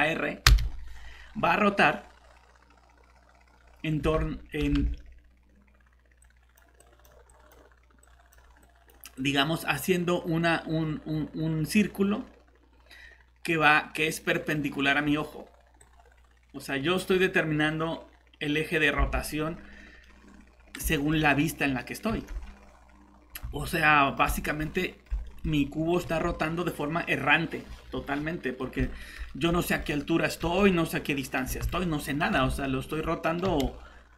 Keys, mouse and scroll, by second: 0.5 r, 4.0 Escape, 4.8 alt+Tab, 6.2 click, 19.0 alt+Tab, 20.0 middle click, 22.1 shift+r, 23.3 Escape, 25.5 scroll up 1, 26.0 shift+r, 27.6 Escape, 28.6 middle click, 30.4 shift+r, 31.4 Escape, 33.5 r.